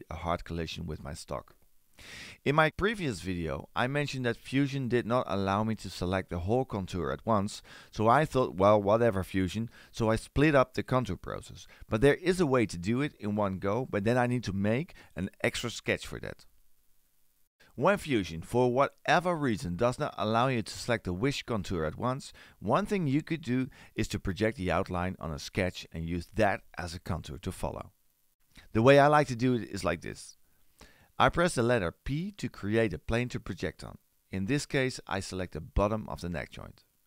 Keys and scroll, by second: 33.2 p.